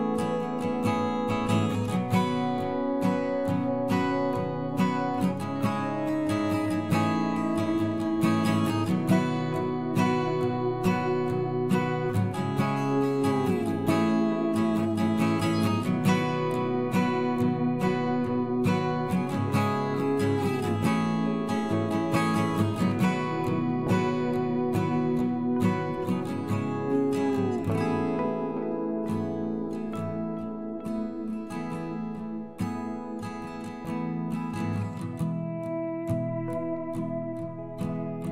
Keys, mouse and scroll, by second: 4.9 middle click, 5.3 middle click, 5.9 middle click, 11.0 middle click, 11.2 middle click, 13.1-14.9 drag, 15.9 a, 23.2 ctrl+KP_Add, 24.4 ctrl+KP_Add, 24.9 ctrl+KP_Add, 30.4 Delete, 33.0 middle click, 34.5 middle click, 34.8 middle click, 36.4-37.7 middle drag.